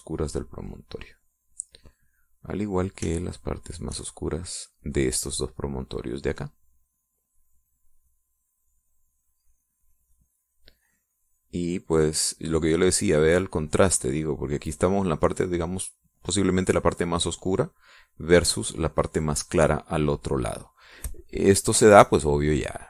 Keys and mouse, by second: 1.0-2.4 drag, 4.4 shift+click, 5.3-8.2 shift+drag, 8.9-11.1 drag, 12.8-19.0 drag, 21.8 middle click.